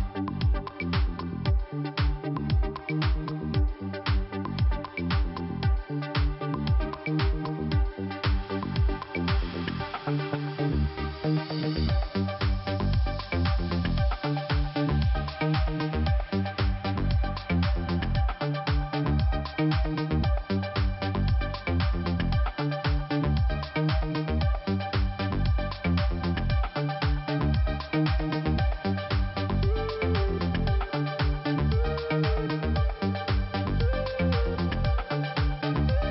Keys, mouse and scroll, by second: 0.5 click, 2.0 click, 3.4 click, 4.4 click, 4.5 click, 4.9 click, 5.0 double click, 5.9 double click, 9.3-10.3 scroll down 2, 10.6 click, 10.8 click, 11.5 click, 11.6 click, 12.8 click, 12.9 click, 13.5 middle click, 14.0-15.1 scroll up 1, 15.2 scroll up 1, 18.8 shift+Delete, 19.5 click, 20.5 click, 25.2 click, 25.5 click, 28.2 click, 28.2 click, 31.0 click, 33.6 click, 33.7 click, 35.6 click.